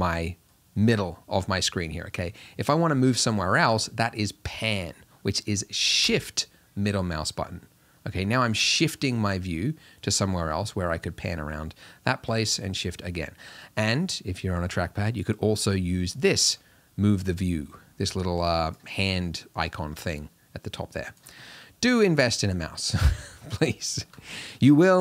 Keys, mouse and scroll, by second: 16.3-25.0 drag.